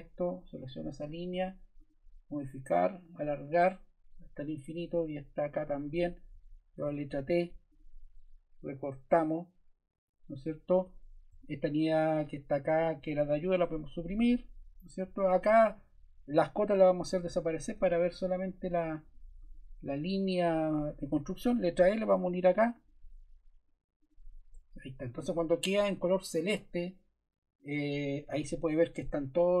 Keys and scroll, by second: 6.3 i, 6.8 t, 11.3 Escape, 13.6 BackSpace, 21.5 l, 25.0 Escape, 28.5 t.